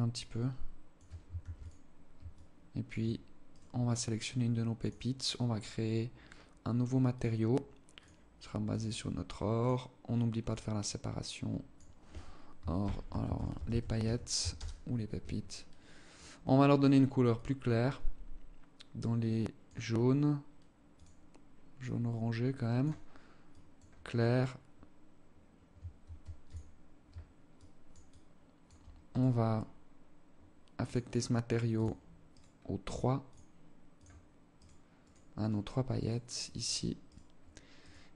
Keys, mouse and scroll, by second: 0.8 ctrl+s, 1.8 alt+shift+click, 3.0 right click, 3.8 scroll up 1, 4.3 click, 6.6 click, 7.4 click, 9.9 click, 15.6 click, 20.4 click, 24.0 scroll down 1, 25.4 ctrl+s, 27.0 alt+click, 27.6 alt+click, 28.6 right click, 30.3 click, 31.8 right click, 32.8 click, 34.1 right click, 34.4 right click, 35.4 right click, 35.8 right click, 36.2 right click, 36.5 right click, 37.2 right click, 37.8 right click.